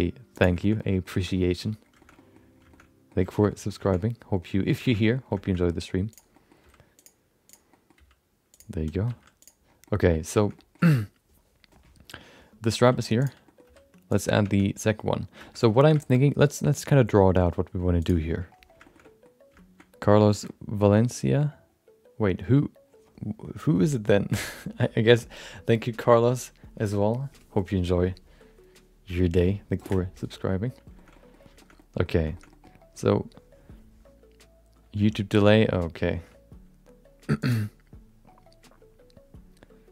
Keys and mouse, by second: 0.6 middle click, 0.8 middle click, 1.1 shift+middle click, 1.3 middle click, 2.0 shift+middle click, 2.1 middle click, 2.7 shift+middle click, 3.3 shift+middle click, 3.5 middle click, 3.8 shift+middle click, 4.0 middle click, 4.8 shift+middle click, 5.0 middle click, 5.4 shift+middle click, 5.6 middle click, 6.1 click, 6.3 middle click, 6.6 g, 7.5 click, 7.7 middle click, 8.0 g, 9.1 g, 9.8 middle click, 10.4 middle click, 10.5 middle click, 13.2 click, 13.4 middle click, 13.6 r, 14.7 Tab, 14.9 middle click, 15.4 shift+middle click, 15.6 middle click, 16.0 shift+middle click, 16.1 middle click, 18.0 click, 18.8 shift+middle click, 19.0 middle click, 19.8 middle click, 20.2 shift+middle click, 20.4 middle click, 30.9 shift+middle click, 31.1 middle click, 31.6 shift+middle click, 31.7 middle click, 32.3 shift+middle click.